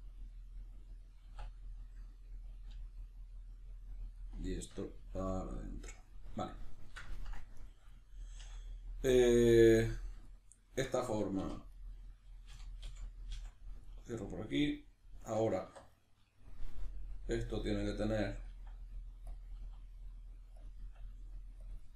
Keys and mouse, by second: 0.2 click, 0.3-2.5 middle drag, 1.2 e, 2.5 click, 2.7 g, 3.8 click, 4.1-7.6 middle drag, 5.0 g, 5.8 click, 7.6 right click, 8.0-11.4 ctrl+middle drag, 11.4 2, 11.8 right click, 12.5 f, 13.8-15.9 middle drag, 15.6 1, 15.9 right click, 18.5 e, 19.4 click, 19.6 e, 20.7 click, 20.8 e, 21.8 click.